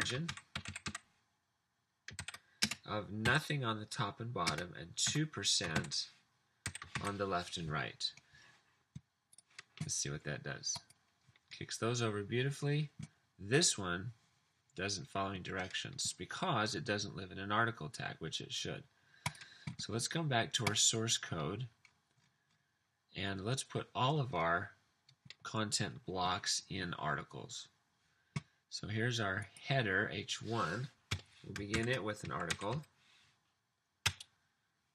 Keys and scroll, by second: 0.0-3.2 typing, 4.5-7.9 typing, 31.2 Return, 31.5-33.1 typing, 34.1 Return.